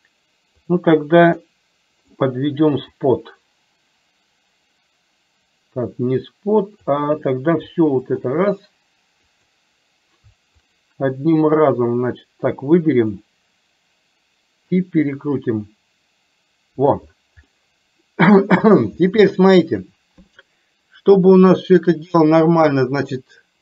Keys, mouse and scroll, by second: 1.5-2.3 middle drag, 3.0 click, 3.3-7.1 drag, 8.2 shift+click, 9.5 click, 10.7 shift+click, 12.8-13.5 drag, 15.1-17.0 drag, 17.7-19.0 middle drag, 19.3-20.0 shift+middle drag, 21.6 click.